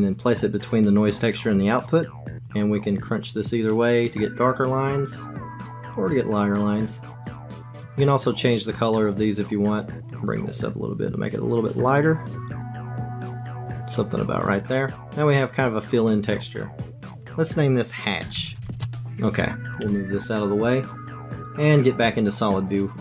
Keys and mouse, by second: 2.5-4.9 drag, 5.2 click, 5.9-7.6 drag, 7.8 click, 13.3 click, 16.9 click, 17.1-18.8 drag, 19.8 g, 22.6 click.